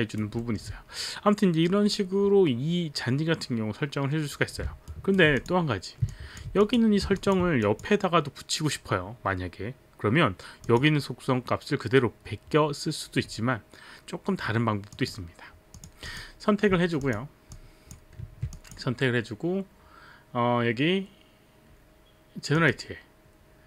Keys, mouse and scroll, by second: 0.0 alt+right click, 0.4 alt+middle click, 4.9 alt+right click, 5.3 click, 6.0 click, 6.8 alt+click, 10.6 click, 15.0 click, 15.7 click, 16.7 click, 17.5 click, 18.6 click, 22.5 click.